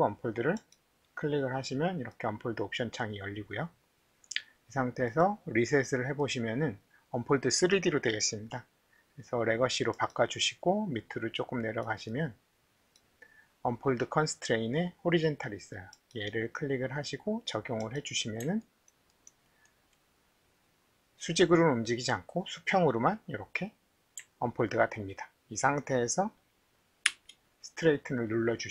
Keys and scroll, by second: 27.1 t.